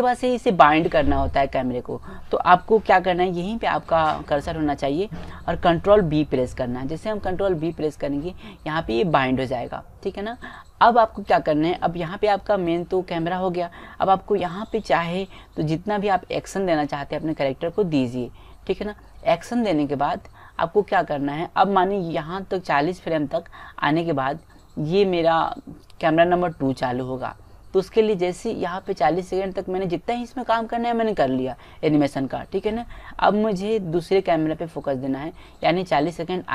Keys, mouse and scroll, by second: 7.6 ctrl+b, 11.9-13.1 middle drag, 14.2-15.6 middle drag, 15.8-21.1 middle drag, 23.8-25.5 drag, 30.5-32.3 drag.